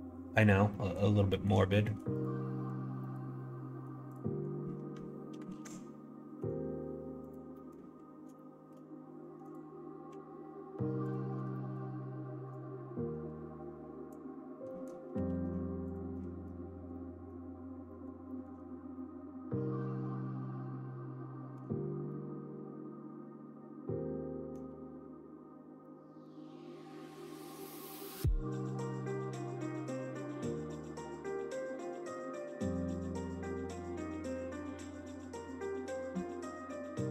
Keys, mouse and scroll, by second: 0.6 middle click, 1.3 click, 1.6 shift+click, 2.1 click, 2.6 Tab, 2.9 middle click, 5.4 alt+z, 6.3 3, 7.5 middle click, 8.3 shift+middle click, 9.4 click, 11.0 ctrl+click, 11.6 middle click, 12.5-14.2 drag, 14.6 scroll up 1, 14.6 middle click, 15.2 alt+z, 15.8 click, 16.1 middle click, 16.8 middle click, 17.8 middle click, 18.2 shift+middle click, 18.9-21.5 middle drag, 22.0-24.4 middle drag, 25.8 middle click, 26.6 click, 27.3 middle click, 27.6 middle click, 28.9 middle click, 29.3 middle click, 29.7 e, 31.8 middle click, 33.6 s, 35.4 scroll up 1, 35.5 middle click, 36.1 shift+middle click, 36.7 middle click.